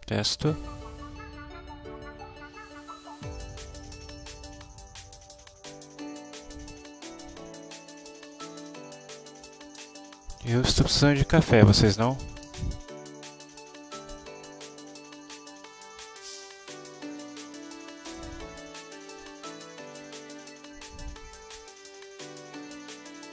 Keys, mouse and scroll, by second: 4.1 End, 5.9 shift+Home, 6.7 shift+End, 7.3-9.4 typing, 9.8 Return, 11.9 Down, 12.5 Return, 13.4 End, 13.9-14.8 typing, 15.3 Return, 17.0 Down, 17.5 Up, 17.9 Down, 18.2 Return, 18.6 End, 18.9 Down, 20.5 F6, 22.3 space.